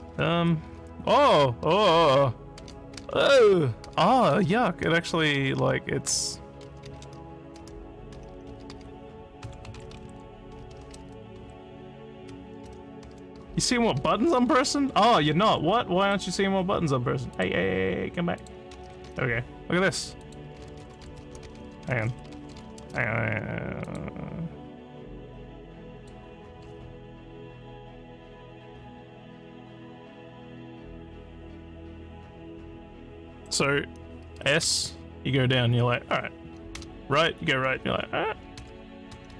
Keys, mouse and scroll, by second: 18.4 click, 18.5-23.3 typing, 19.9 click, 20.3 click, 23.9 click, 26.0 click, 34.6 s, 36.8 d, 38.6-39.3 typing.